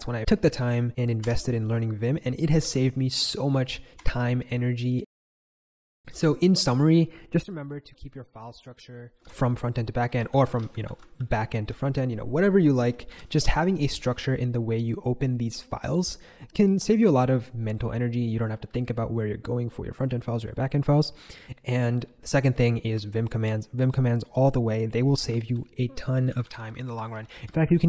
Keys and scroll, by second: 1.2 Escape, 1.4-3.6 typing, 3.9 Escape, 4.6 k, 4.8 k, 7.7 super+k, 8.1 super+j, 9.1 ctrl+super+j, 10.3 ctrl+super+k, 10.8 super+j, 13.0 shift+super+e, 25.0-27.8 typing.